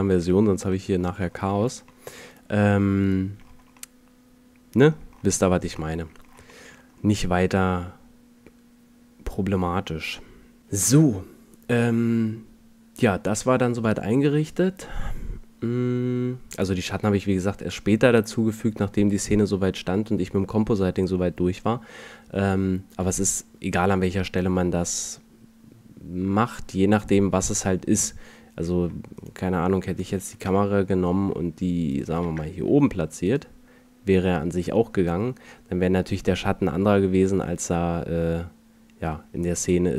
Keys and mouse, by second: 0.1-1.0 middle drag, 1.4 middle click, 1.7 a, 6.0 middle click.